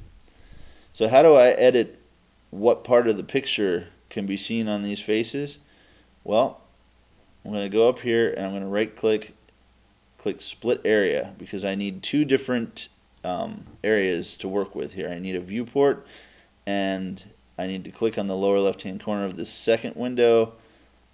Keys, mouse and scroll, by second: 8.7-10.6 right drag, 18.5-20.2 drag.